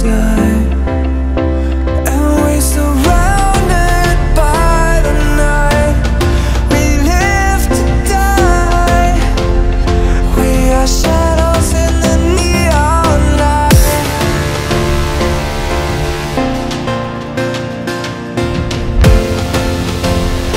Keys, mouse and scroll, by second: 0.6 e, 1.9 e, 2.5 r, 3.7 e, 4.8 e, 5.5 r, 6.5 click, 7.2 e, 10.6 shift+click, 10.8 f, 11.0-11.4 scroll up 3, 11.4 click, 12.5-13.0 scroll down 5, 13.0 shift+middle click, 13.2-13.7 scroll up 1, 13.7 click, 14.0 click, 16.3 click, 17.3 click, 17.4 e, 18.4 r, 19.2 click, 19.9 e.